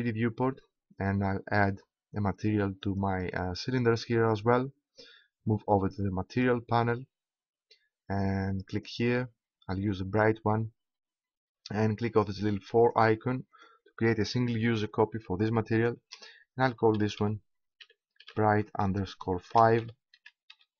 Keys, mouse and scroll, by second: 2.9-4.4 right drag, 4.9-6.3 middle drag, 6.3-8.4 drag, 8.7-10.4 drag, 12.8-16.4 drag.